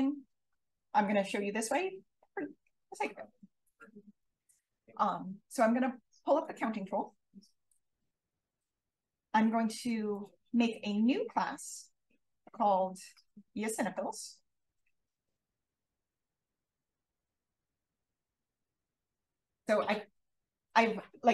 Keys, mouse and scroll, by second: 4.1 click, 11.6 click, 12.6-16.0 typing, 17.3 click.